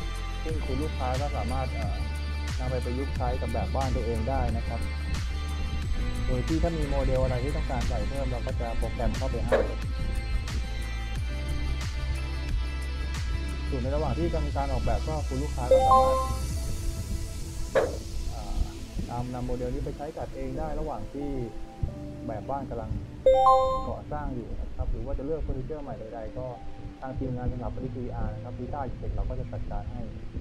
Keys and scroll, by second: 1.6 s, 5.1 d, 7.2 w, 7.6 a, 8.5 d, 10.4 s, 12.0 a, 12.5 w, 14.3 d, 16.8 a, 19.4 d, 21.6-23.5 typing, 24.9 w, 26.8 a, 29.5 w.